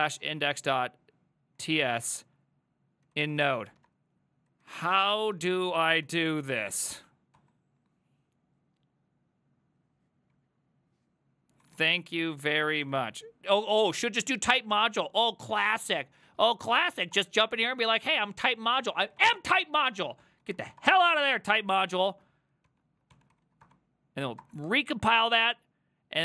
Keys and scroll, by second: 0.0-7.4 typing, 11.5-20.8 typing, 18.9 ctrl+c, 20.8 Return, 21.0 ctrl+a, 21.2 ctrl+a, 21.9 ctrl+a, 22.1 ctrl+a, 22.7 ctrl+c, 23.1-24.0 typing, 24.4 Return, 26.1-26.2 typing.